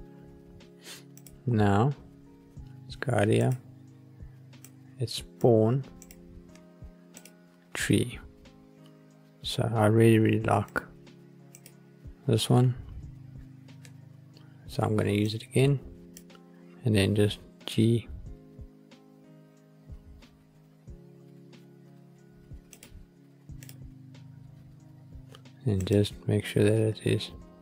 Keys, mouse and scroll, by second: 1.0 click, 3.4-4.3 drag, 4.5 click, 5.9-13.0 drag, 15.1-16.2 drag, 17.0 g, 22.7 click, 23.5-24.1 drag, 24.1-24.9 scroll up 5, 25.7 click, 26.7 g.